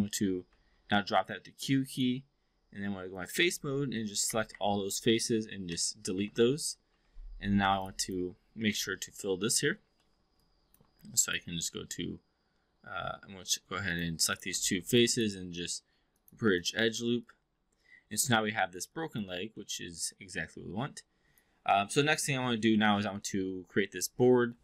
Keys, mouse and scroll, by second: 0.5 q, 1.3-1.7 alt+drag, 1.9 click, 2.7 3, 3.0 click, 4.2 Up, 5.6 Delete, 6.7 2, 8.0 click, 8.7-9.5 alt+drag, 10.0 alt+middle drag, 10.4 alt+click, 11.1-13.6 right drag, 14.2 click, 14.8 shift+click, 15.1-16.2 right drag, 16.2 click, 16.5 click, 17.2-18.3 alt+drag, 18.5 alt+middle drag, 18.9 alt+click, 19.5 alt+middle drag, 20.1-21.4 alt+drag.